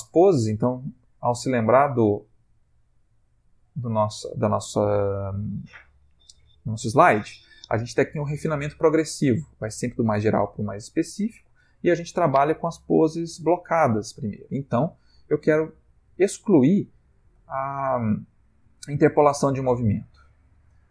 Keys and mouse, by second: 20.0 click.